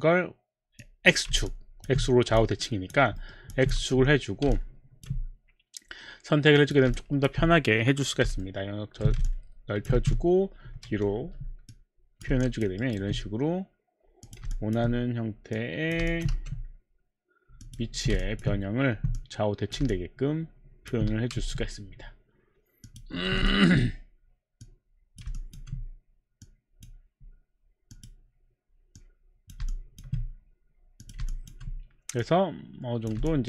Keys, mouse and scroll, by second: 0.9 click, 1.3 click, 1.5 alt+click, 2.3 alt+click, 2.4 alt+click, 3.4 alt+middle click, 3.5 alt+click, 3.8 4, 4.6 alt+click, 4.8 alt+click, 5.0 alt+click, 5.2 alt+click, 6.5 click, 8.3 b, 8.4 middle click, 9.3 alt+click, 9.9-12.2 typing, 11.7 click, 12.4 alt+click, 12.8 alt+right click, 14.2 click, 14.5 alt+click, 15.5 click, 16.1 alt+click, 16.4 4, 17.6 click, 17.8 5, 18.3 alt+click, 19.9 alt+click, 21.3 4, 22.8 click, 23.4 alt+5, 23.4 click, 23.5 alt+click, 24.2 alt+click, 24.6 click, 25.4 alt+click, 26.4 click, 27.0 click, 27.9 click, 28.4 click, 29.0 click, 29.4 click, 29.7 alt+click, 31.0 click, 31.3 alt+click, 32.2 click, 33.2 alt+click.